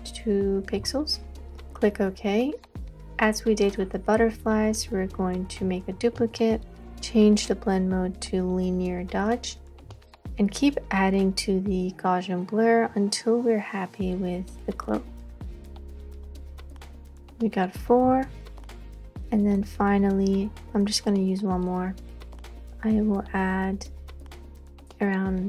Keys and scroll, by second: 0.8 2, 6.2 super+j, 18.1 super+j.